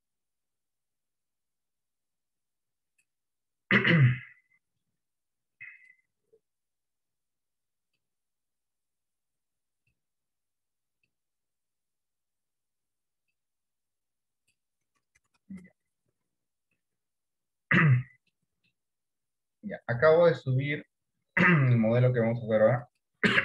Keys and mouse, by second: 18.6 middle click.